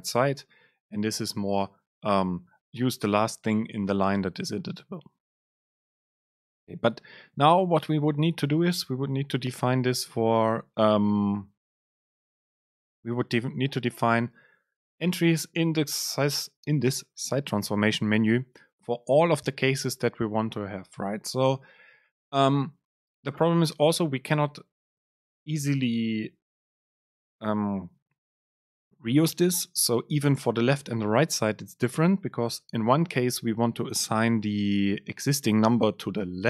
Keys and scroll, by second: 0.2 Down, 0.9 End, 1.8 shift+Left, 13.3 Delete.